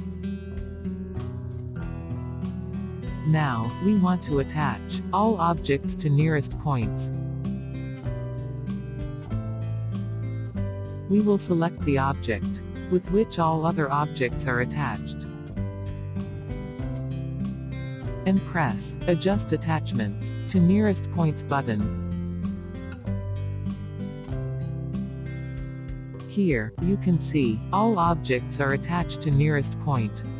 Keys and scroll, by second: 2.0 e, 24.8 e.